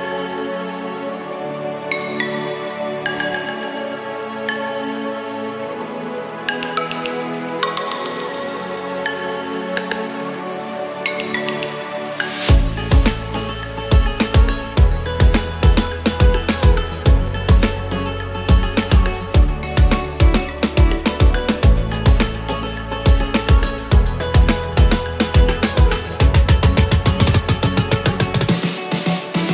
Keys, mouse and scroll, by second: 2.2 ctrl+z, 2.2 ctrl+z, 2.4 ctrl+z, 2.5 ctrl+z, 8.6 ctrl+z, 14.3 ctrl+z, 14.4 ctrl+z, 14.6 ctrl+z, 24.9 ctrl+z, 25.1 ctrl+z.